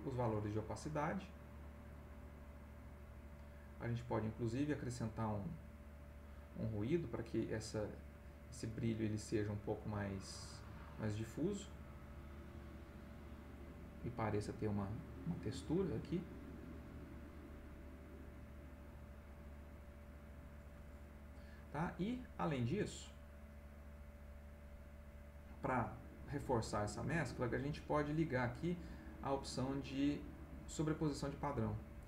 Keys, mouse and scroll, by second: 3.6 click, 8.7 click, 16.4 click, 22.4 click, 29.0 click.